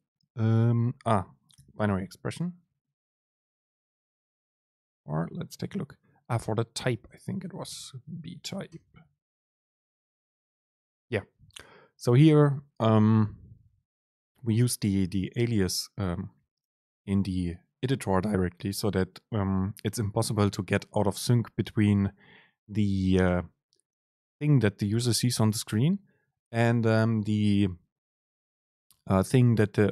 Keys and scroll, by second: 1.7 super+n, 7.0 super+n.